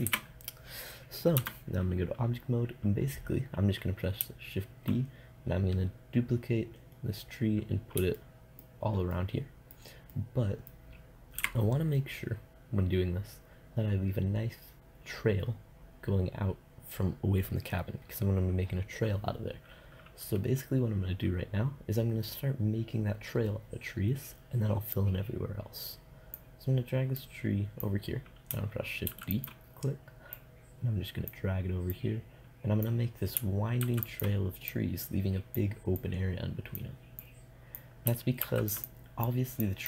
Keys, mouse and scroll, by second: 0.2 shift+z, 1.6 Tab, 5.6-7.2 middle drag, 10.3 middle click, 10.5 middle click, 11.3 click, 11.6 KP_0, 14.7-25.1 middle drag, 25.1-27.0 drag, 27.4-29.2 drag, 29.2 shift+d, 29.6-33.8 drag, 33.8 middle click, 34.0 shift+d, 34.4-38.9 drag, 38.6 shift+d.